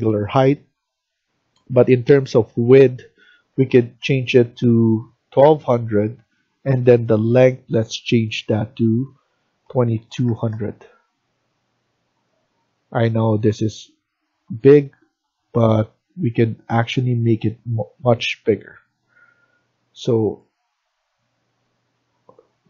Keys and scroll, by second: 3.2-4.4 typing, 9.3-10.2 typing, 12.2-13.0 typing.